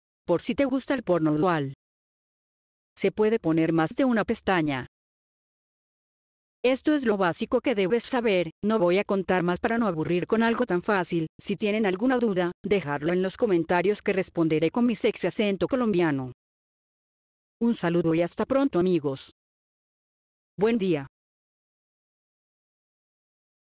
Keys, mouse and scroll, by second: 0.2 click, 1.3 click, 1.7 click, 2.9 click, 6.5 click, 9.5-13.8 drag, 14.1 right click, 14.8 click.